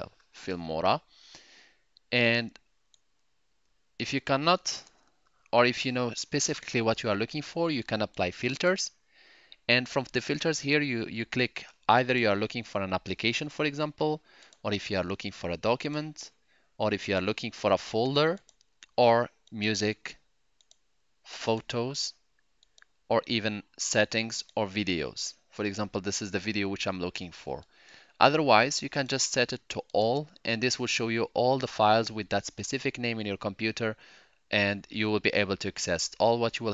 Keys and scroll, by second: 0.0-0.4 typing, 4.1-5.5 typing.